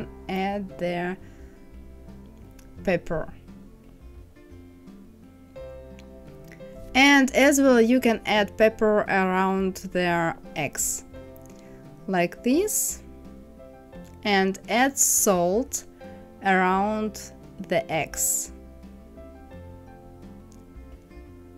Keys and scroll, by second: 4.4 KP_6, 4.6 Return.